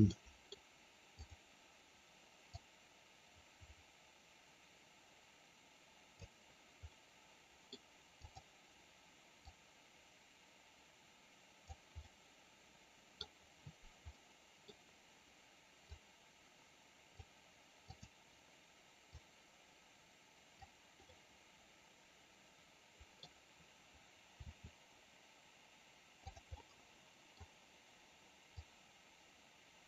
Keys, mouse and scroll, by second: 0.2 middle click, 1.2 click, 2.5-6.2 drag, 6.9 middle click, 8.3 click, 9.5-11.7 drag, 12.0-13.3 middle drag, 14.2-14.7 middle drag, 16.0-17.3 drag, 18.0 click, 19.3-20.7 drag, 21.2-23.2 middle drag, 26.5-27.4 middle drag, 28.7-29.8 drag.